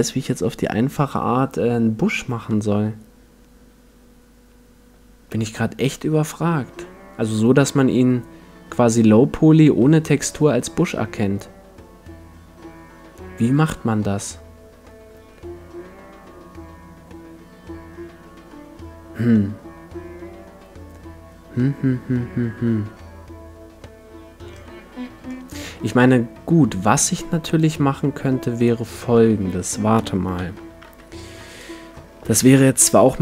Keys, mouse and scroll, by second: 5.3-24.5 middle drag, 24.8 middle click, 25.1-26.3 middle drag, 28.6-30.4 drag, 30.1-33.2 middle drag, 30.3 KP_1, 30.8 KP_5, 32.3 shift+a.